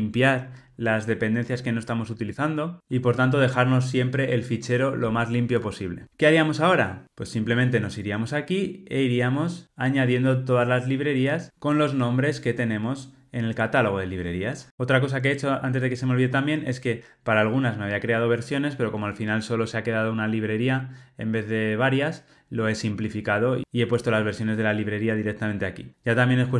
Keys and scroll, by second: 14.7 Escape.